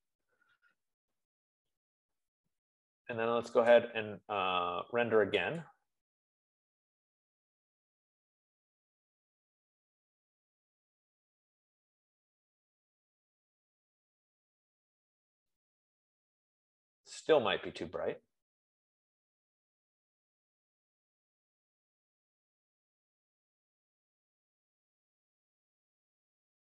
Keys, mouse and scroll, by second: 0.0-0.2 typing, 3.0-3.8 typing, 4.2-11.0 drag, 20.1 F15, 24.4-26.6 middle drag.